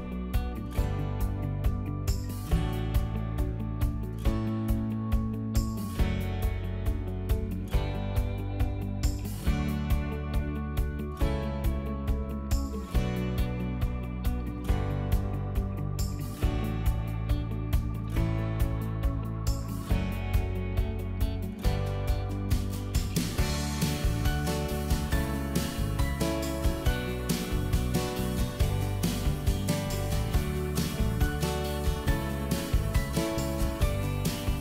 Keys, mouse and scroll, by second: 0.3 middle click, 1.0 shift+middle click, 1.6 scroll up 1, 2.1 click, 2.4 middle click, 3.3 p, 3.7 click, 5.5 middle click, 8.1 click, 8.8 Delete, 9.1 middle click, 10.2 click, 10.5 middle click, 11.2 click, 16.1 click, 20.2 shift+click, 21.0 click, 21.6 middle click, 22.9 l, 23.4-25.9 drag, 27.8 ctrl+z, 28.4 click.